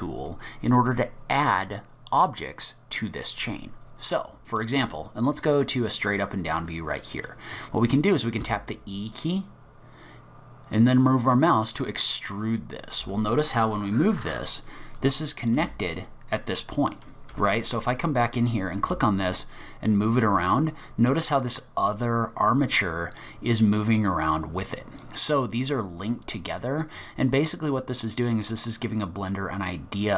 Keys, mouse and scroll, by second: 0.2 click, 5.5 click, 7.3-7.9 scroll down 3, 8.4 e, 13.0 space, 14.9 click, 15.6 g, 17.8-18.6 scroll up 5, 18.8 g, 28.7-29.3 scroll down 1, 29.3-30.1 scroll down 2.